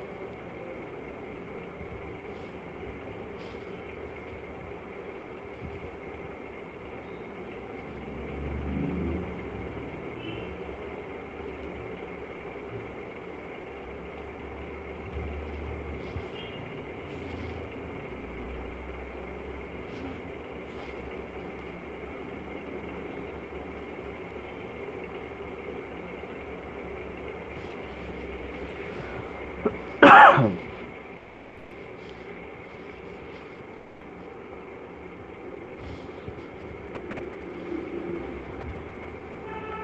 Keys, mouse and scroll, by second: 1.1 click, 2.3 click, 2.7 click, 3.0 click, 4.4 click, 5.0 click, 5.4 click, 6.2 click, 6.9 click, 7.9 click, 8.5 click, 9.5 click, 10.2 click, 10.6 click, 11.0 click, 11.6 click, 13.4-16.1 shift+click, 15.3 click, 16.8 alt+click, 18.9 click, 19.3 click, 20.9 alt+click, 22.5 click, 23.3 click, 23.9 click, 24.1-25.8 alt+click, 24.5 click, 25.1 click, 25.5 click, 26.4 click, 27.2-27.8 shift+click, 27.6 shift+click, 34.2 shift+click, 35.1 right click, 36.2 alt+click.